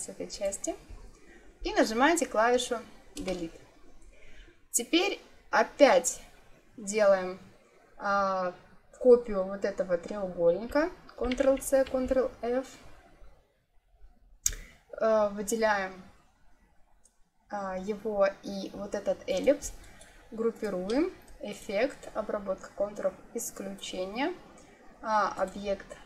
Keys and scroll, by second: 3.1 Delete, 11.1 ctrl+c, 11.8 ctrl+f.